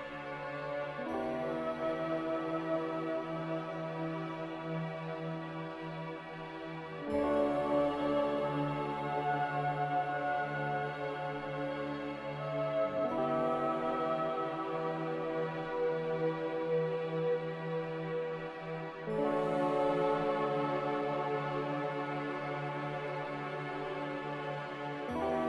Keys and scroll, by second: 7.8 3, 7.9 Return, 13.1 Return, 16.1 m, 19.6 a.